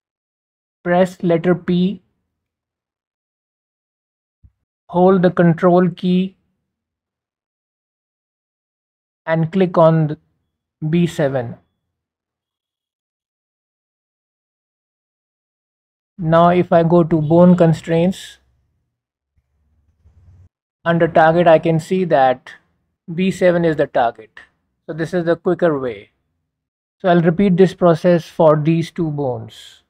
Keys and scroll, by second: 2.2 p, 6.9 p.